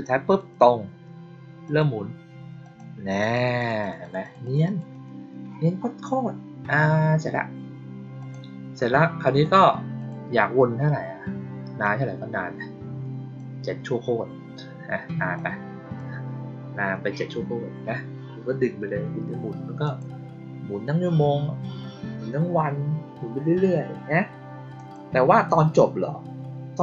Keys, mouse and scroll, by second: 1.6 click, 2.5 click, 3.0 click, 3.2 click, 3.5 click, 3.7 click, 3.9 click, 4.1 click, 4.3 click, 4.5 click, 4.8 click, 8.1 click, 9.3 click, 9.9 click, 11.7-13.3 drag, 15.3 click, 19.7 click, 24.7 click.